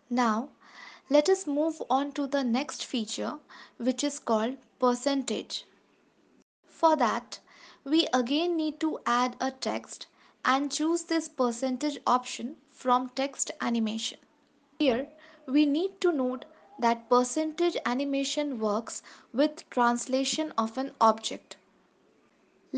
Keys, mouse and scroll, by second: 2.5 ctrl+s, 7.3 shift+a, 10.3 click.